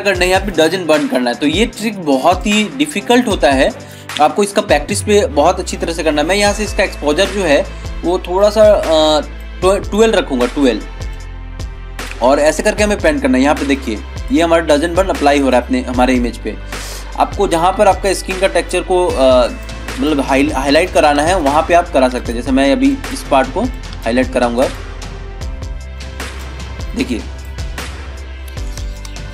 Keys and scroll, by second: 29.0 ctrl+alt+z.